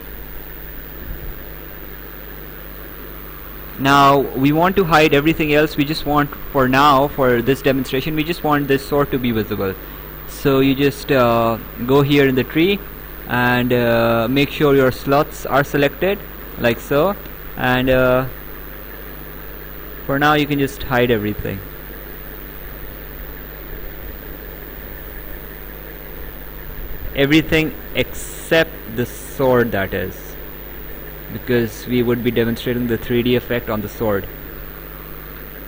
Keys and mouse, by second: 3.5 right click, 10.0 click, 15.5 click, 18.2 click, 27.8 click, 31.5 click.